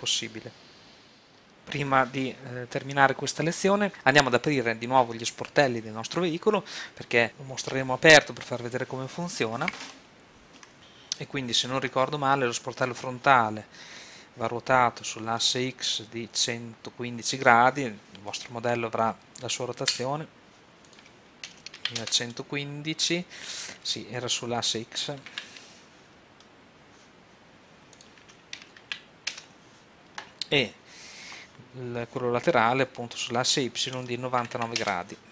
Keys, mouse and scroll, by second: 11.4-12.9 right drag, 20.8 click, 21.5 KP_1, 27.0 super+z, 27.9-29.0 drag, 28.8 KP_1, 30.0 middle click, 30.8-32.5 right drag, 33.2-34.5 drag, 34.5 KP_9.